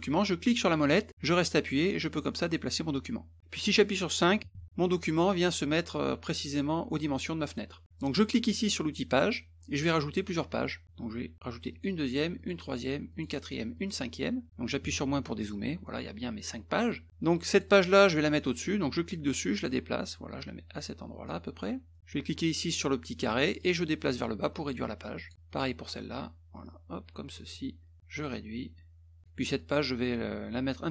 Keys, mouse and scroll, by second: 1.1-3.4 middle drag, 9.2 click, 11.7 click, 12.4 click, 13.1 click, 13.7 click, 16.1 middle click, 17.5 click, 18.9-21.3 drag, 21.9 middle click, 23.6-25.3 drag, 25.3-27.3 drag, 28.0-29.2 drag, 29.6-30.9 drag.